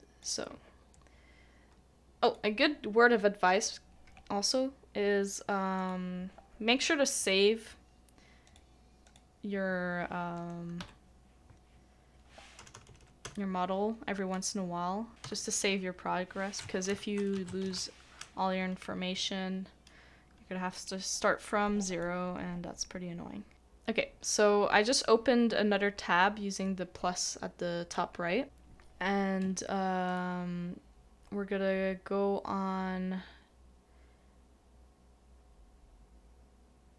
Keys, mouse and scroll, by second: 10.8 middle click, 12.6 BackSpace, 15.1 typing, 16.6-18.0 typing.